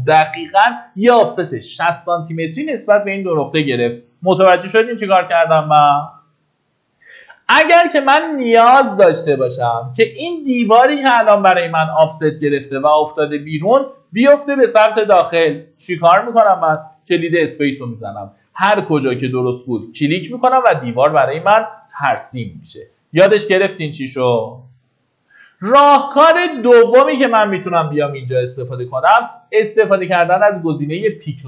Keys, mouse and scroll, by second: 12.2 space, 14.2 space, 15.2 space, 19.7 click, 20.7-21.2 scroll down 1, 22.6 Escape, 30.9 click.